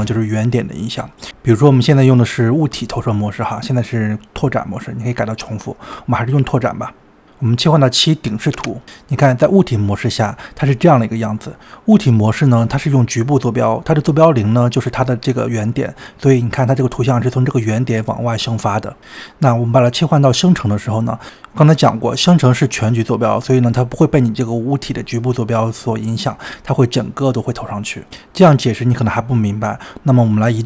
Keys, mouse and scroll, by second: 0.0 click, 0.3 scroll up 2, 0.7-3.2 middle drag, 3.4-7.1 drag, 7.1-8.5 middle drag, 8.5 KP_7, 9.0-11.2 shift+middle drag, 11.2-11.7 scroll down 2, 11.7-12.2 scroll up 2, 20.2 drag, 23.2 scroll down 2, 24.4-27.5 scroll up 2, 27.5 g, 29.8-30.1 scroll down 2, 30.4 g.